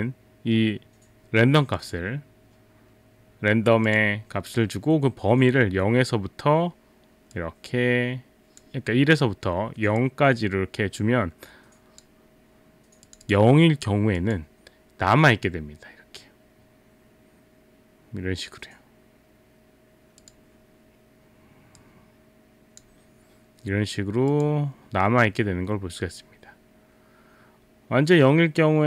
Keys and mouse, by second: 1.8 click, 3.9 click, 7.4 click, 10.0 click, 13.1 click, 13.3 click, 20.2 click, 21.8 click, 24.3 click.